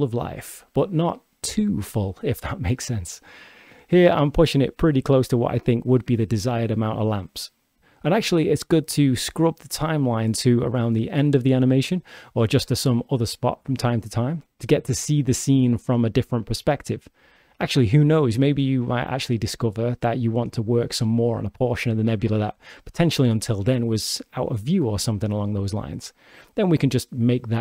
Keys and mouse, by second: 0.6 click, 1.3-2.3 drag, 2.8 g, 6.2 click, 8.0 click, 9.3-11.9 shift+drag, 13.0 shift+click, 13.9 shift+middle click, 14.5 shift+middle click, 17.1 shift+d, 20.2 shift+d, 27.5-27.6 drag.